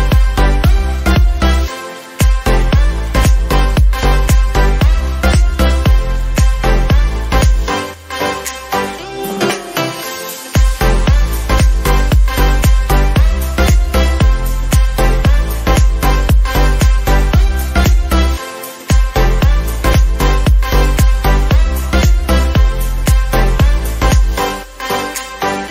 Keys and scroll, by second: 7.1 ctrl+z, 9.7 ctrl+alt+z, 13.7 ctrl+alt+z, 18.0 ctrl+j.